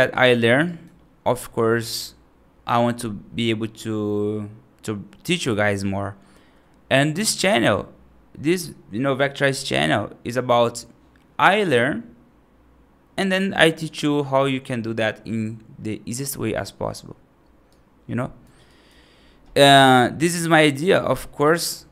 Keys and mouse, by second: 0.0 right click, 0.5 right click, 17.6 right click, 18.5 right click.